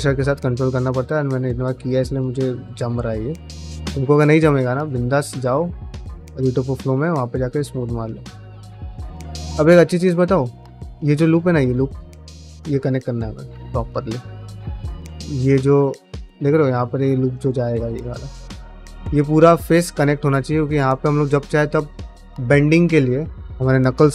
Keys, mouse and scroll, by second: 0.0 middle click, 0.8 shift+click, 1.1 shift+click, 1.3 shift+click, 1.5 shift+click, 1.7-2.8 middle drag, 3.0 shift+click, 3.3 shift+click, 3.5 middle click, 3.8 shift+click, 4.3 shift+middle click, 4.7 shift+click, 5.0 middle click, 6.0 middle click, 7.1 middle click, 7.5 middle click, 8.4 Tab, 8.6 middle click, 9.0 middle click, 9.4 shift+middle click, 9.6 middle click, 10.7 ctrl+r, 11.9 right click, 12.3 ctrl+z, 12.6 middle click, 12.8 1, 13.2 2, 13.4 click, 13.6 middle click, 14.7 middle click, 15.2 shift+middle click, 15.6 middle click, 16.4 ctrl+r, 17.5 3, 17.9 alt+click, 18.1 middle click, 20.1-21.4 middle drag.